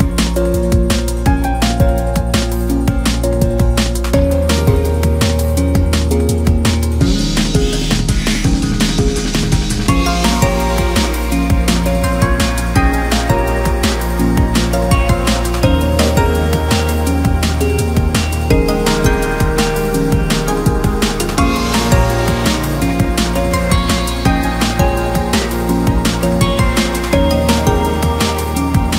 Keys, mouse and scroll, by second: 2.4 click, 2.7-3.2 scroll down 9, 3.2-3.7 scroll up 1, 3.7 right click, 4.7 click, 4.9-5.6 scroll down 9, 5.6 shift+middle click, 5.9-6.2 scroll down 2, 6.2-7.6 middle drag, 7.6 KP_1, 8.9 scroll up 3, 9.3-9.8 scroll down 2, 9.8 drag, 10.1 scroll up 1, 10.2 scroll down 1, 10.4-11.3 middle drag, 11.3-12.4 drag, 12.4-13.3 middle drag, 13.3 click, 13.9-14.3 scroll up 2, 14.3 KP_1, 15.1 click, 15.6 scroll up 2, 15.9 Tab, 16.1 click, 16.5 KP_1, 17.2 shift+middle click, 18.2 click, 18.6-19.0 scroll down 1, 19.0-21.0 shift+middle drag, 21.0 click, 21.1-21.7 scroll up 2, 21.7 Tab, 21.8-22.2 scroll down 2, 22.2 a, 22.7 3, 22.9-24.4 scroll up 2, 24.4 u, 24.8 scroll up 2, 25.0 scroll down 1, 25.3 Tab, 25.6 click, 25.8 Tab, 26.1 Tab, 27.0 click, 27.2 Tab, 27.6 a, 27.9 KP_Decimal, 28.3-28.9 scroll down 6.